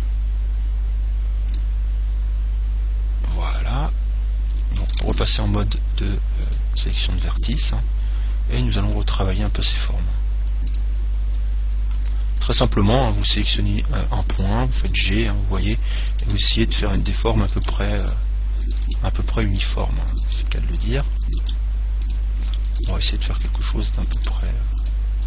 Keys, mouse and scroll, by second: 0.1 click, 5.2 ctrl+Tab, 7.8 right click, 10.9 click, 13.4 g, 14.6 click, 15.0-16.4 right drag, 15.2 g, 16.4 g, 17.7 g, 19.0 g, 20.4 g, 21.7 g, 23.1 g.